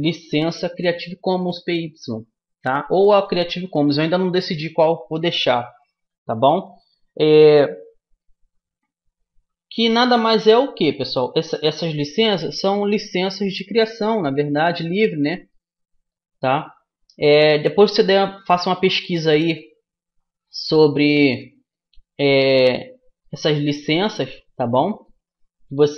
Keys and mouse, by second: 8.1 middle click, 12.8-16.8 middle drag, 17.6 middle click, 19.6-25.9 middle drag.